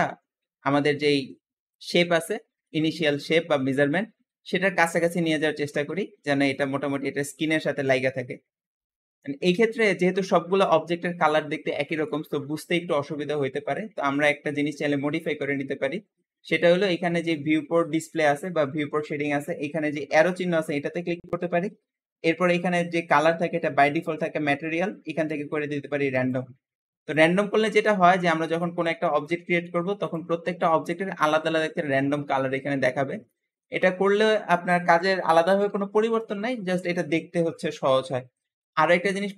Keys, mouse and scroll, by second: 2.2-5.9 shift+middle drag, 8.1-8.8 scroll up 2, 8.8-10.0 shift+middle drag, 10.0-10.5 scroll down 1, 10.5 click, 11.7 scroll up 2, 13.8-17.0 scroll down 2, 18.1 click, 27.0 click, 27.3-27.7 scroll down 1, 27.7-28.1 middle drag, 28.1-28.5 scroll down 1, 28.5-29.9 shift+middle drag, 29.9 click, 30.5-32.6 shift+middle drag, 32.6-33.2 scroll up 4, 33.2-33.7 shift+middle drag, 33.7-36.9 scroll up 2.